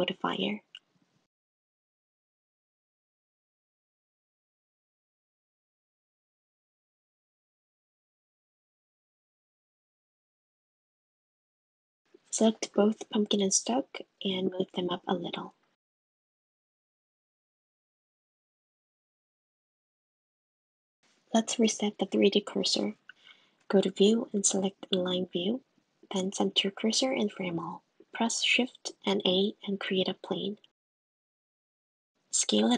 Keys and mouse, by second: 0.2 middle click, 1.0 click, 3.9 click, 5.2-7.3 drag, 8.1 click, 8.3-10.1 drag, 11.2 click, 12.6 click, 14.2 right click, 14.9 g, 19.5 shift+a, 21.0 super+x, 21.3 super+z, 22.9-26.0 drag, 26.6 click, 27.4 click, 29.0 shift+a, 30.3 s.